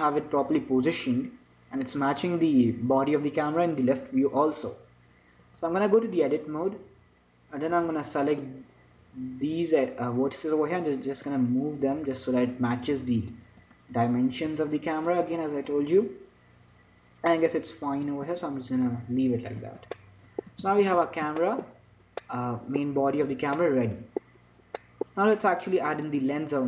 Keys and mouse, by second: 5.8 Tab, 6.8 a, 8.0 b, 11.6-13.4 drag, 13.9 a, 14.7 b, 17.7-20.3 drag, 18.6 Tab, 20.9 shift+c, 21.2 z, 23.6 n, 24.5-26.3 drag.